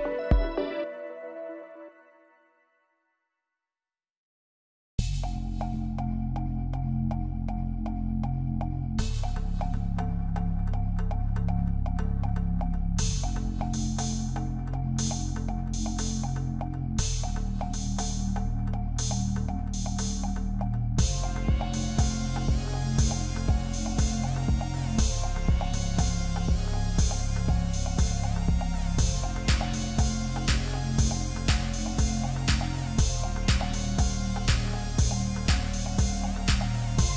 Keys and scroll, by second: 3.5 ctrl+z, 30.3 ctrl+z, 30.9 ctrl+=.